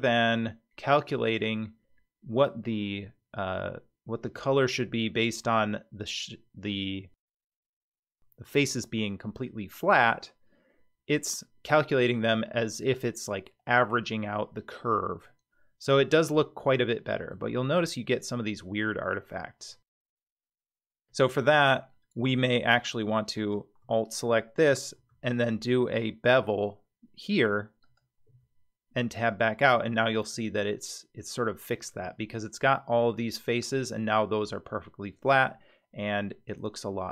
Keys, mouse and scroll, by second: 15.8-17.3 middle drag, 17.6-18.9 scroll up 2, 21.4 Tab, 23.3 alt+click, 24.9 ctrl+b, 28.3 Tab, 29.3-30.3 middle drag, 31.9 Tab.